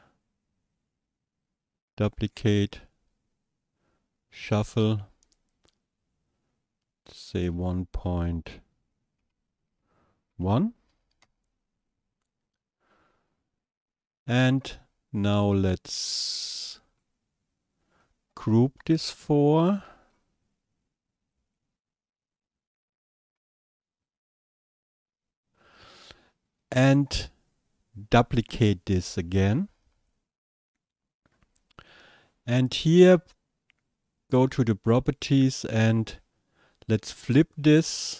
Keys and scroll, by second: 9.7 ., 10.3 KP_1, 11.2 Return.